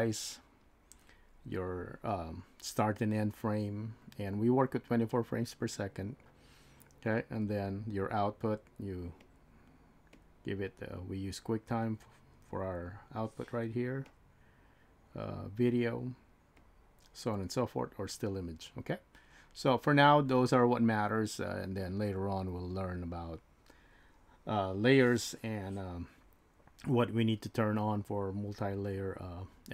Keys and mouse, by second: 9.2-10.2 drag, 11.8 click, 14.1 click, 15.2-16.7 drag.